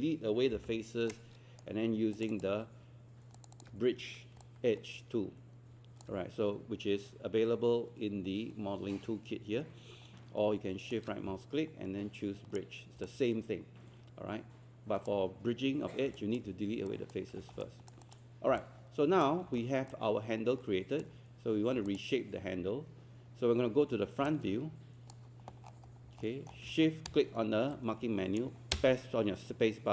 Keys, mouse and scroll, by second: 0.5 Delete, 1.1 right click, 2.2 click, 3.4 shift+click, 4.4 alt+click, 10.9-13.0 shift+right drag, 13.1-15.4 alt+drag, 16.2 alt+click, 16.9 alt+click, 17.4 scroll down 1, 17.6 alt+click, 18.6 alt+click, 19.4 scroll down 1, 19.6 alt+middle click, 19.9 alt+click, 21.9 alt+click, 24.4-25.4 drag, 25.7 scroll up 1, 26.2 alt+middle click, 26.2 alt+scroll up 1, 27.1-29.9 drag.